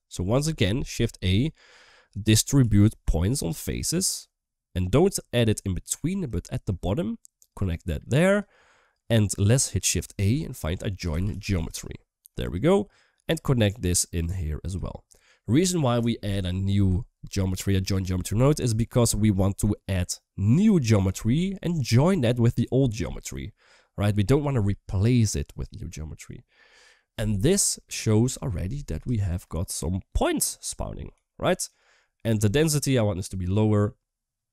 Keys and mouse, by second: 0.8 shift+a, 6.3 shift+middle click, 7.2 click, 8.7 click, 9.9 shift+a, 12.9 g, 13.9 click, 20.3 click, 21.6 middle drag, 27.5 middle click, 29.0 shift+middle click, 29.3-30.1 middle drag, 30.9 KP_1, 31.8 shift+middle click, 32.8-34.5 drag.